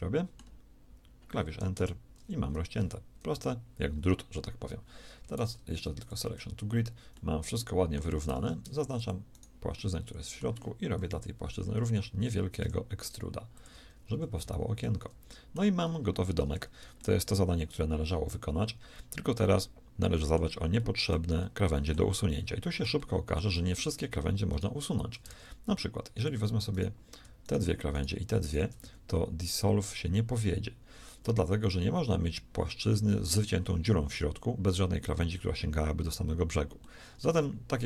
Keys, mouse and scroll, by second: 3.1 KP_3, 5.2 shift+s, 8.1 ctrl+Tab, 10.8 KP_1, 12.5 e, 13.9 a, 14.3 z, 25.1 ctrl+Tab.